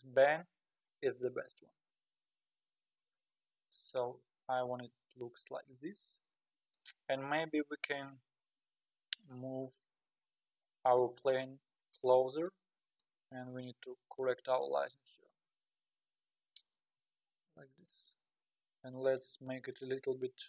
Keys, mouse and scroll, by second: 1.7-2.8 scroll down 8, 2.8-3.8 scroll up 11, 4.1 scroll down 1, 5.6-5.9 scroll up 5, 6.1-6.6 scroll down 5, 6.6-7.0 scroll up 4, 7.0-7.8 scroll down 7, 8.2-8.6 scroll up 7, 8.6-9.2 scroll down 4, 9.2 click, 9.5 g, 13.0 click, 13.4 g, 16.4 r, 19.0-19.5 drag, 19.7-20.4 drag.